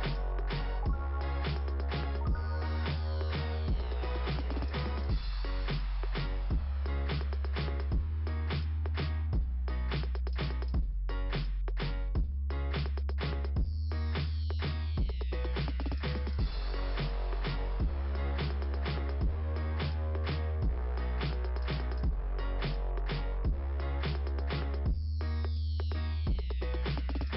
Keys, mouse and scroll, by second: 7.0 click, 12.0 click, 12.6 right click, 14.1 click, 15.3 click, 15.5 click, 17.0 click, 17.3 click, 18.9-27.3 typing.